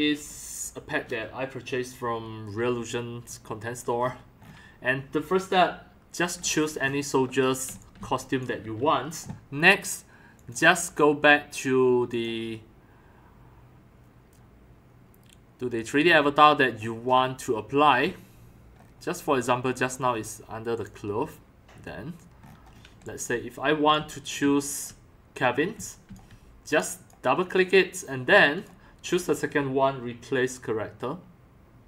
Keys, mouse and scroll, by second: 6.4 scroll down 1, 14.2 right click, 18.8-19.3 scroll up 2, 22.9 x, 23.3 c, 23.9 x, 24.4 c, 25.7 x, 26.0 c, 28.6 click, 29.0 click.